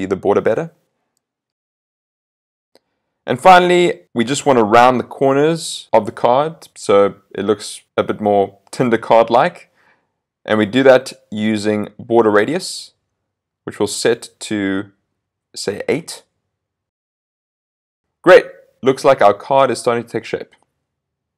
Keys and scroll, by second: 17.0 super+s.